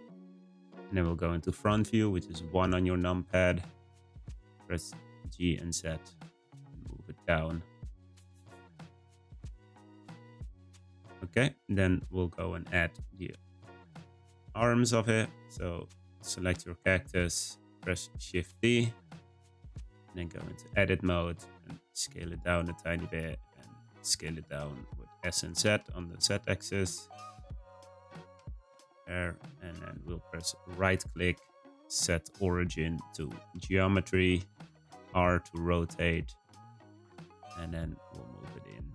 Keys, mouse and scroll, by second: 2.4 `, 4.1 g, 6.8 middle click, 7.3-7.9 scroll up 1, 7.9-8.7 middle drag, 8.7-11.8 scroll down 2, 12.6 `, 15.0-16.1 scroll up 2, 16.1-17.1 shift+middle drag, 17.1-17.9 scroll up 1, 18.1 shift+d, 20.3 Tab, 21.4 s, 23.4 s, 27.5 s, 28.3 Tab, 29.2 r, 30.8-33.8 right drag, 34.6 r, 37.4 g.